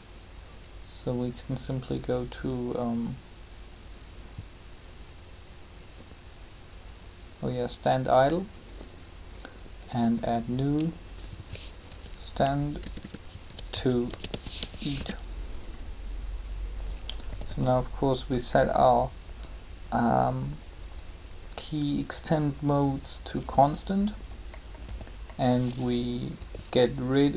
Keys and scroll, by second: 11.7-15.1 typing, 17.2 typing, 24.7 typing.